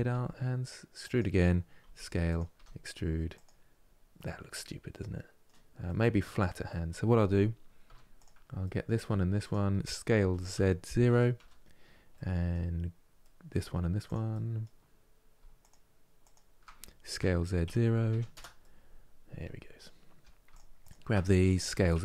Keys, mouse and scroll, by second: 3.4-3.8 scroll down 1, 3.8-7.5 middle drag, 7.5 3, 7.8 click, 8.3 middle click, 9.1 shift+click, 9.9 s, 11.8-13.7 middle drag, 13.7 click, 14.0-15.3 middle drag, 15.3 shift+click, 15.9 shift+click, 16.9 s, 18.3-20.2 middle drag, 20.2-21.4 shift+drag, 21.4 s.